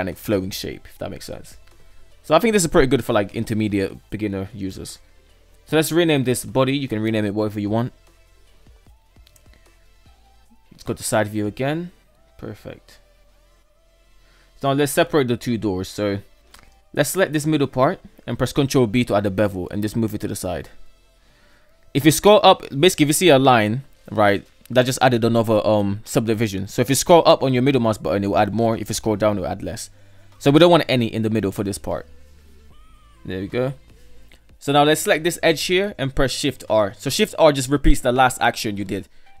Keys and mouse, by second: 0.4-3.1 middle drag, 3.6 F2, 6.3 BackSpace, 6.5 BackSpace, 9.1 KP_3, 9.2 KP_6, 10.3 KP_3, 11.7 alt+z, 12.9 shift+middle click, 14.1 Tab, 15.7 alt+right click, 17.9 ctrl+b, 32.3-32.8 shift+middle drag, 33.4 alt+right click, 36.1 shift+r.